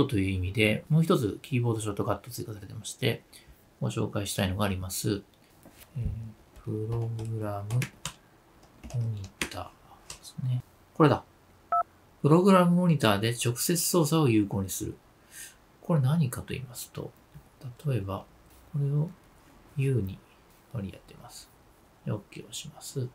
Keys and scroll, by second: 0.8 super+n, 21.2 space, 21.2 u.